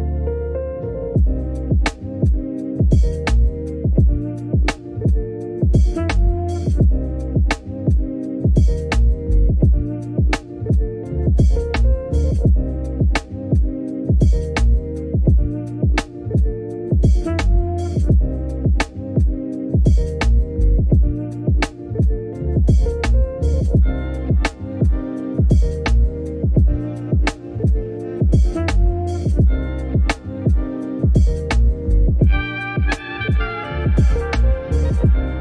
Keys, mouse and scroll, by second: 0.2 Tab, 0.5 Tab, 0.7 Tab, 1.0 ctrl+a, 1.2 Tab, 1.6 Tab, 1.7 scroll up 2, 1.8 shift+click, 2.6 shift+click, 3.3 shift+middle click, 3.8 shift+click, 4.8 shift+click, 5.1 shift+middle click, 5.6 shift+click, 5.9 shift+middle click, 6.5 scroll down 1, 6.6 middle click, 7.1 g, 8.9 click, 9.1 click, 9.2 alt+click, 9.4 s, 10.0 middle click, 10.7 alt+shift+click, 11.0 middle click, 11.4 s, 12.2 middle click, 13.1 s, 13.7 middle click, 14.7 click, 15.6-20.8 drag, 21.1 shift+middle click, 21.2 scroll up 1, 21.5 click, 22.7 click, 23.2 click, 23.4 s, 23.9 g, 24.5 Tab, 24.7 click, 25.0 s, 25.7 click, 25.9 s, 26.3 ctrl+r, 26.5 click, 26.9 s, 27.3 click, 27.5 g, 28.5 e, 32.1 r, 32.3 g, 32.6 click, 32.8 g, 33.3 alt+click, 33.4 click, 33.6 click, 33.9 r, 34.6 click, 34.8 s.